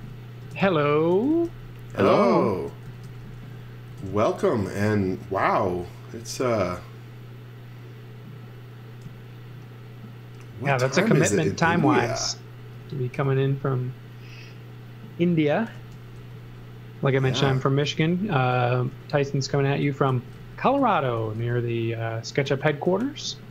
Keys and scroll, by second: 0.0-3.8 typing, 5.4 m, 11.1 z, 11.8 x, 13.1 b, 15.7-22.4 typing.